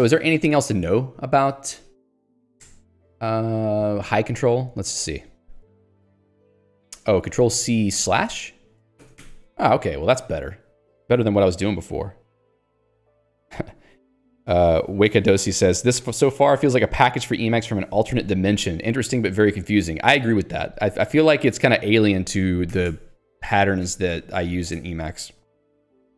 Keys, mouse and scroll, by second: 0.8 Escape, 1.8 ctrl+alt+j, 2.1-2.9 typing, 3.8 scroll up 2, 5.0 middle click, 6.3-7.0 scroll down 3, 22.7 ctrl+g, 23.2 Escape, 23.8 j, 24.7 ctrl+g.